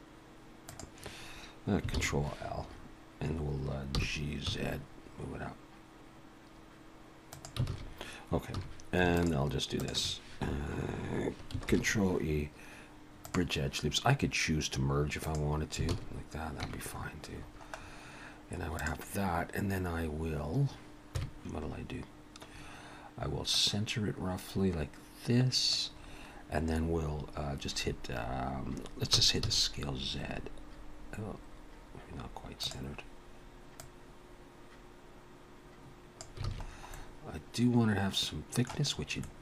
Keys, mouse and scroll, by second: 0.5 click, 2.0 ctrl+l, 2.7-3.6 scroll up 1, 3.6 scroll up 1, 3.9 g, 7.7 alt+a, 8.5 2, 9.2 alt+shift+click, 10.0 alt+shift+click, 11.7 ctrl+e, 15.2 click, 15.9 alt+a, 16.7 Tab, 16.8-18.8 scroll down 13, 18.8 click, 18.8 scroll down 1, 21.0 KP_1, 22.5-23.5 scroll up 2, 23.5 click, 23.5 scroll up 1, 26.0-27.7 scroll down 3, 29.2 s, 33.8 click, 36.5 alt+a, 36.6-36.9 scroll down 4, 36.9 middle click, 38.9 scroll up 4, 39.2 middle click.